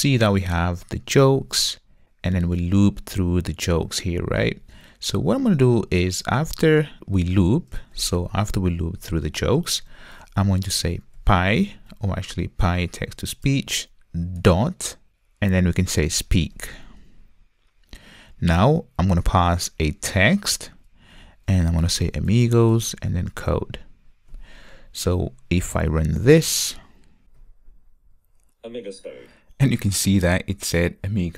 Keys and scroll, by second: 13.4 Return, 17.0 Return, 27.2 ctrl+r.